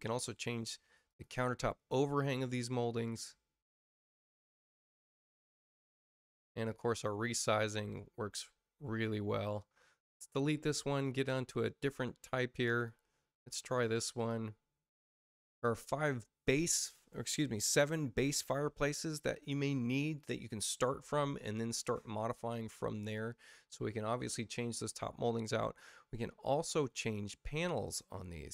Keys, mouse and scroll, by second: 1.0 click, 2.0 click, 3.0 click, 5.6 space, 6.2 space, 6.6 click, 7.9 click, 11.2 click, 12.7 click, 14.1 click, 18.8 space, 27.8 click.